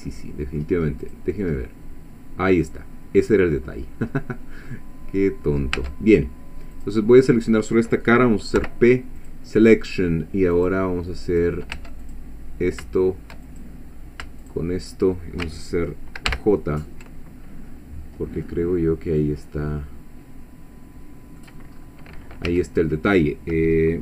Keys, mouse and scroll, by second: 0.1 middle click, 1.0 click, 1.6-3.4 middle drag, 3.6-4.3 scroll up 3, 5.2 scroll down 2, 5.6 scroll up 2, 5.8 Tab, 6.8 click, 8.6 p, 9.2 click, 10.6 click, 11.3 click, 11.8 Tab, 12.0 click, 13.5 shift+click, 14.4 shift+click, 16.3 ctrl+j, 18.2 scroll down 2, 18.5-21.6 middle drag, 21.7-22.5 scroll up 2, 22.5 1.